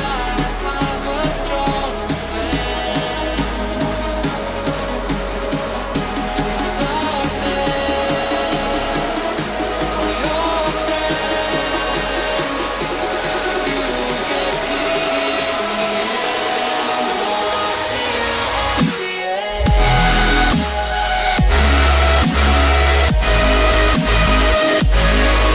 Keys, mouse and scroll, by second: 0.4 right click, 2.2 right click, 2.2 click, 3.1 right click, 3.9 click, 5.7 right click, 6.5 click, 7.9 scroll down 1, 9.5 click, 12.1 ctrl+c, 12.3 ctrl+v, 13.2 click, 20.2 double click, 21.1 click, 21.9 scroll down 1, 22.6 scroll up 1, 23.2-24.4 scroll down 1.